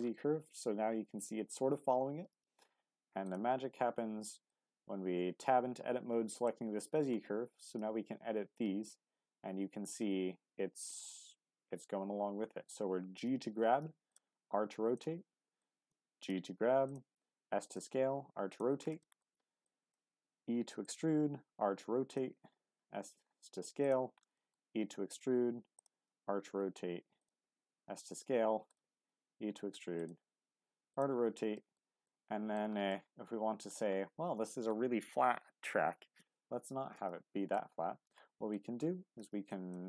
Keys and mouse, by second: 3.8 Tab, 4.5-6.8 drag, 14.1 click, 14.3 r, 14.9 click, 15.6 click, 16.1 g, 16.9 click, 17.1 s, 17.7 click, 18.0 r, 18.5 click, 19.0 shift+middle click, 19.6 click, 20.2 e, 20.8 click, 21.0 r, 22.1 click, 22.6 s, 23.8 click, 24.3 shift+middle click, 24.7 e, 25.8 click, 26.0 r, 27.2 click, 27.5 s, 28.7 click, 28.9 e, 29.9 click, 30.2 r, 30.9 click, 31.5 shift+middle click, 32.1 middle click, 32.9 middle click, 37.0 middle click, 38.5 middle click, 39.5 shift+click.